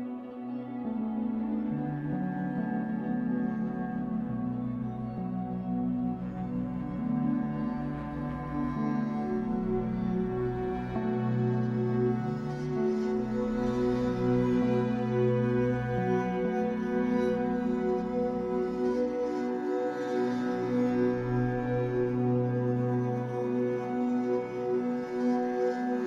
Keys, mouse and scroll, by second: 0.4-5.2 middle drag, 2.0 l, 2.9 alt+n, 6.3 click, 6.5-11.8 middle drag, 8.0 scroll up 2, 8.6 scroll down 2, 9.6 scroll down 2, 10.3-11.0 scroll up 2, 11.0-11.3 scroll up 1, 11.8-15.5 drag, 16.8-26.0 middle drag, 17.9 scroll down 2, 18.4 scroll up 2, 18.9-19.5 scroll down 2, 19.7-20.2 scroll down 2, 20.7 scroll up 2, 23.1 scroll up 2, 25.1 scroll up 1.